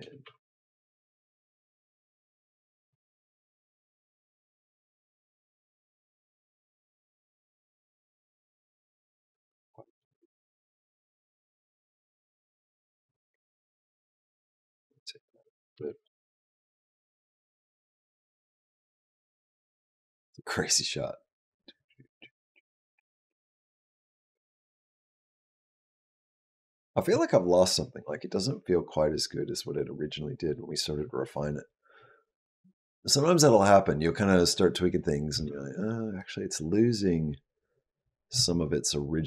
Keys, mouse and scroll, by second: 3.4 click, 4.3 click, 8.6 click, 9.4 click, 9.8 g, 12.9 r, 15.1 click, 15.5 space, 35.1 space, 36.0 click, 38.1 space.